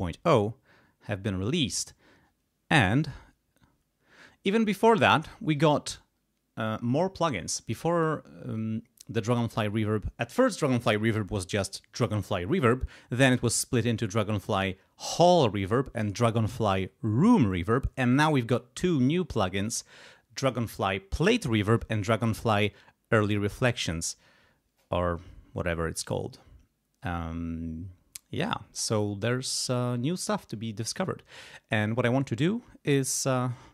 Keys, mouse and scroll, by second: 29.5 click.